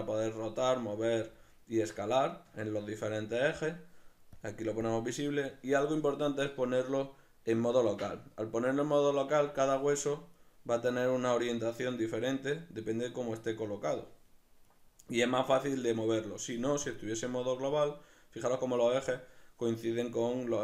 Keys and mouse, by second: 1.4-4.4 ctrl+middle drag, 4.4-6.7 drag, 10.4 right click, 12.0 right click, 13.2 right click, 14.7 right click, 15.8 right click, 16.9-20.6 drag.